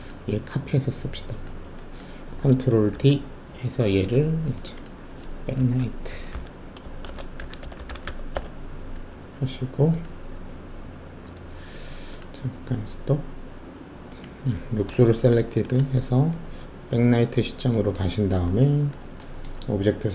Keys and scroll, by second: 2.9 ctrl+alt+d, 5.5-8.3 typing, 8.3 Return, 15.3 alt+shift+z.